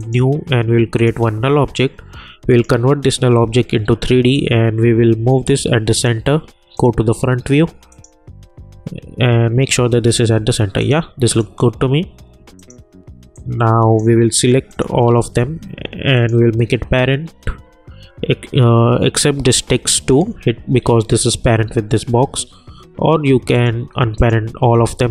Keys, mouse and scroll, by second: 0.0-6.7 drag, 8.9 scroll up 1, 10.8 click, 10.8-14.7 drag, 16.1 shift+click, 20.3 shift+click, 23.5-25.1 drag.